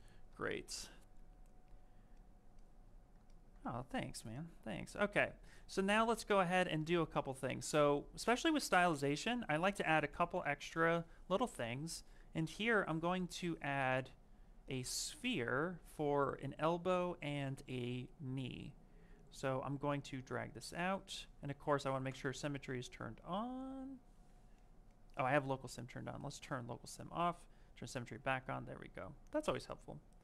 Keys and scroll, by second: 16.7 s, 21.1 ctrl+z, 24.0 ctrl+z.